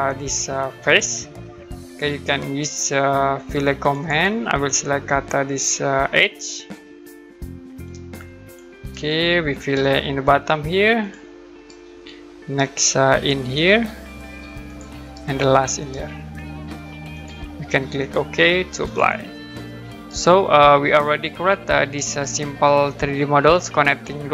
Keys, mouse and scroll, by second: 3.9 click, 6.4 click, 7.8 click, 8.9 right click, 11.0 click, 11.6 right click, 12.8 middle click, 14.6 click, 15.1 right click, 17.1 click, 18.8 click, 19.4-20.0 scroll down 1, 20.0 right click.